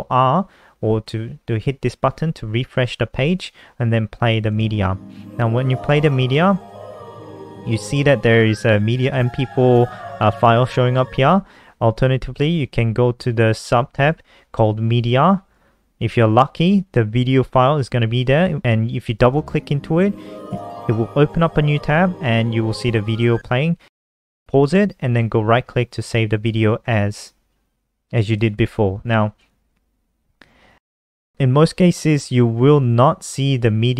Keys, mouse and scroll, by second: 5.1 click, 19.8 click, 23.9 click, 25.1 right click, 27.3 click, 30.0 click.